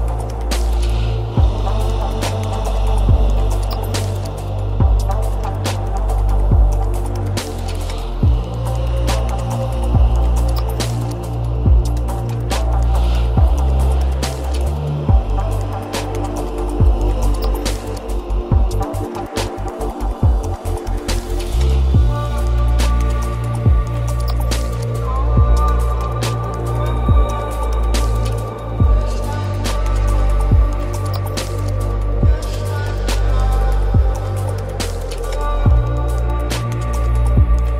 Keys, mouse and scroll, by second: 4.2-12.2 middle drag, 17.5 g, 24.3 g, 27.7-29.7 middle drag, 29.7 g, 36.1-37.7 middle drag.